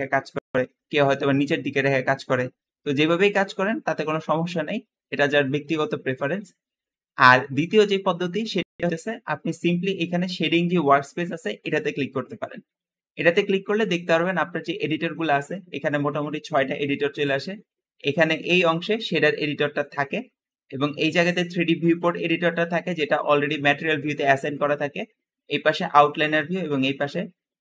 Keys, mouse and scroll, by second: 1.0 click, 18.9 middle click, 19.5 middle click.